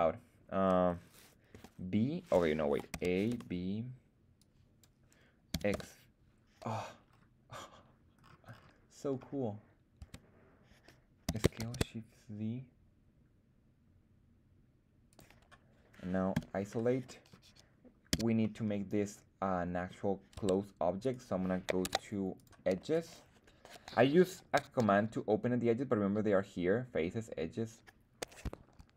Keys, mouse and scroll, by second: 1.5 b, 2.8 a, 3.2 b, 5.4 x, 5.6 g, 6.7-8.1 scroll down 3, 8.1-8.7 scroll up 4, 9.9 Tab, 11.2 s, 11.5 shift+z, 15.0 click, 16.3 /, 17.0 middle drag, 18.0 z, 18.3-19.8 middle drag, 20.3 Tab, 20.9 right click, 21.7 ctrl+Tab, 22.8 right click.